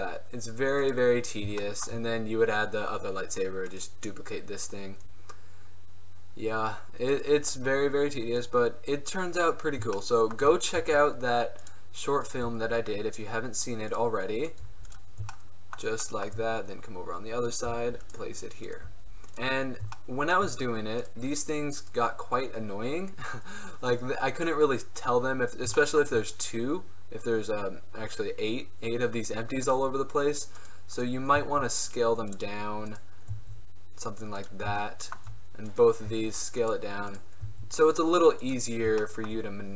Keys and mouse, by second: 3.9-5.8 right drag, 7.3-8.5 right drag, 8.5 middle click, 8.9 middle click, 10.2 middle click, 10.3 right drag, 10.9 g, 12.5 g, 14.8 g, 17.8 g, 19.0 g, 19.8-20.1 drag, 20.6 drag, 25.4 middle click, 25.9-30.1 middle drag, 31.5 s, 33.4 s, 35.8-36.8 right drag, 36.2 s, 37.6 s.